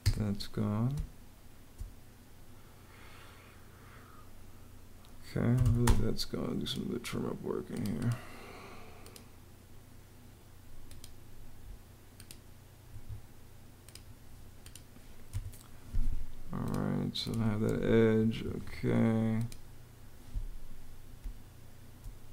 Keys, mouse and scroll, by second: 0.7 space, 5.1-6.0 typing, 12.7 Escape, 15.1 BackSpace, 18.0 Escape, 21.0 space.